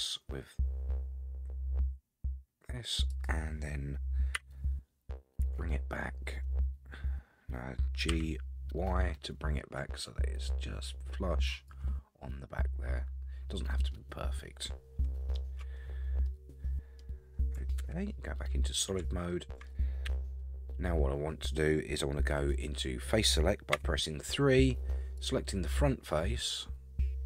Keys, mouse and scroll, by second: 4.3 g, 12.0-12.9 scroll up 9, 13.2-13.9 scroll down 10, 13.9-15.3 middle drag, 15.3 scroll up 2, 15.7-16.2 scroll down 2, 16.2 middle click, 17.8 shift+z, 18.3 scroll up 2, 19.3 shift+middle click, 20.1 KP_1, 20.8-21.4 scroll down 2, 23.7 3, 25.2 click, 26.5 scroll down 1, 26.6-27.2 middle drag.